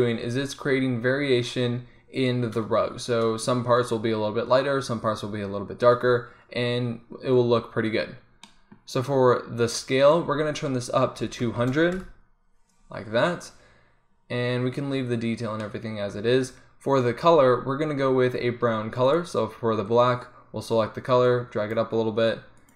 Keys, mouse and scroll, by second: 9.2-11.7 drag, 11.7 KP_0, 11.8 middle click, 19.3-20.5 middle drag, 20.5-21.5 drag, 21.8 click.